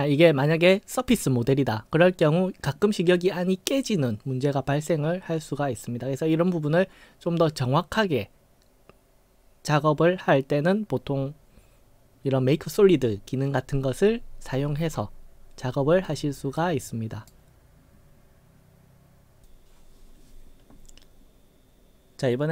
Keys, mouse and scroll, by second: 14.5-15.0 scroll up 5, 15.7 scroll up 3, 16.6-17.3 right drag.